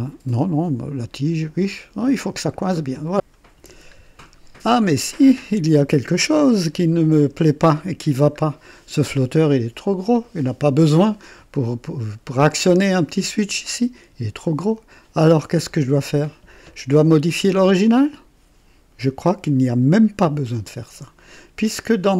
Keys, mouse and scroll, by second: 2.4-2.7 scroll down 1, 2.9 click, 4.0-4.4 ctrl+scroll down 1, 4.8-5.5 ctrl+right drag, 5.6-6.2 ctrl+drag, 6.6 ctrl+KP_1, 7.5 ctrl+KP_2, 8.3 ctrl+scroll up 1, 14.4 click.